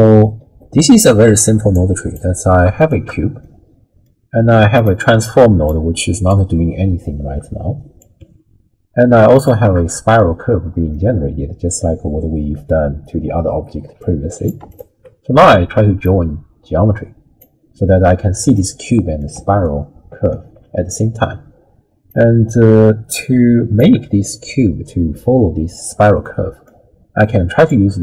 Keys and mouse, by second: 0.0 click, 1.7 click, 2.8 alt+shift+click, 3.4-4.1 middle drag, 4.8 alt+shift+click, 5.3 click, 6.3-8.0 drag, 8.2 w, 9.3 alt+shift+click, 11.0 middle click, 14.1 click, 14.7 alt+shift+click, 16.0-17.4 drag, 17.4 right click, 18.6 middle click, 19.3 d, 19.6 right click, 20.4 d, 20.4 d, 20.5 d, 22.1-23.8 drag, 26.2 middle click, 27.2 click, 27.4 click.